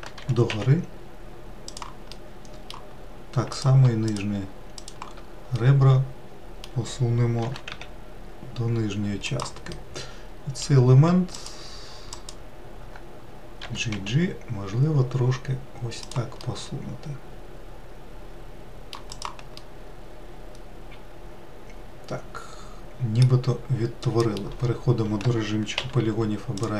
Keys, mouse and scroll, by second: 1.4 g, 3.3-4.7 middle drag, 4.7 click, 5.3 shift+click, 6.0 shift+click, 6.8-8.6 middle drag, 8.6 g, 10.9-12.5 middle drag, 12.5 alt+click, 13.3 alt+click, 14.8 g, 17.6-20.3 middle drag, 20.3 click, 20.8-23.8 middle drag.